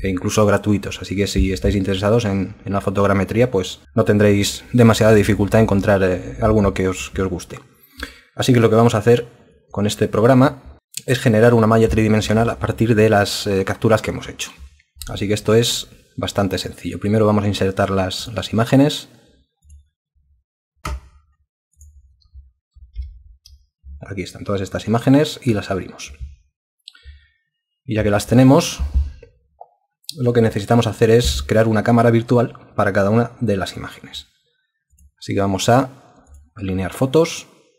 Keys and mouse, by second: 22.9 ctrl+e.